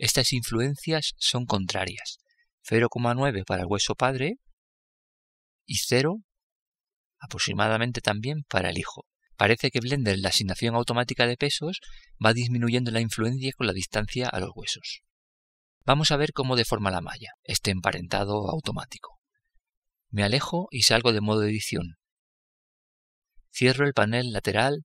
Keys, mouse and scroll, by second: 3.7-5.2 right drag, 6.1-8.1 drag, 11.5-15.0 middle drag, 21.9 Tab.